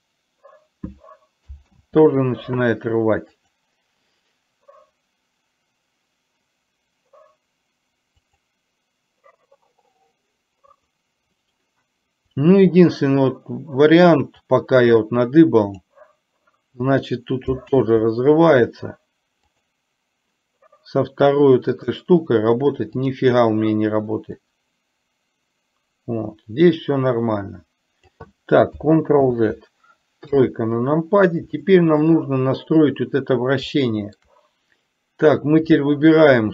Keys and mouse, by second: 1.8 ctrl+z, 3.4 click, 8.3 click, 10.9 click, 12.8 click, 14.5 click, 14.8-15.9 drag, 17.8 ctrl+z, 21.9 click, 23.2 click, 24.5-28.2 drag, 29.3 ctrl+z, 31.8-32.2 shift+middle drag, 33.8-34.3 shift+middle drag.